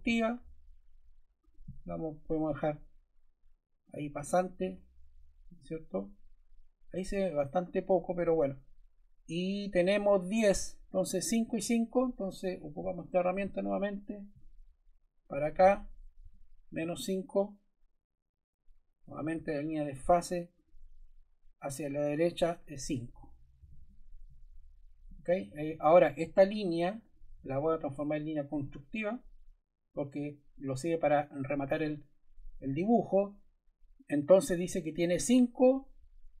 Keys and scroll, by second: 4.6 Escape, 16.2 5, 16.8 Return, 23.5 5, 23.7 Return.